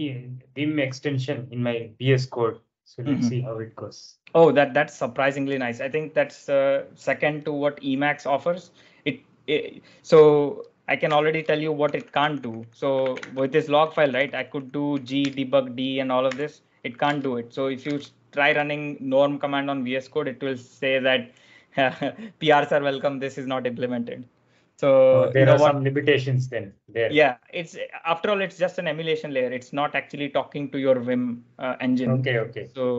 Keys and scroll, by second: 12.3 ctrl+alt+shift+super+l, 12.5 ctrl+alt+shift+super+l, 13.0 ctrl+alt+shift+super+l, 13.3-17.0 typing, 16.0 ctrl+alt+shift+super+l, 17.1 Tab, 17.8 super+Tab, 18.7 Tab, 18.7 BackSpace, 20.1 super+Tab.